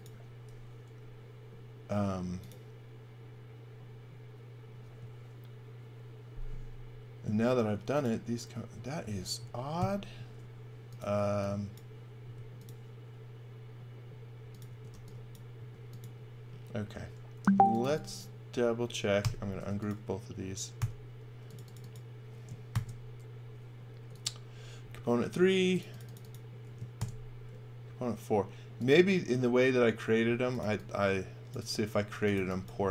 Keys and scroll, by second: 4.8 space, 8.5 space, 9.8 super+z, 11.3 x, 12.2 space, 14.7 space, 14.9 e, 15.6 space, 17.4-19.6 typing, 20.8 u, 22.7 shift+g, 27.0 shift+g, 30.2-32.8 typing.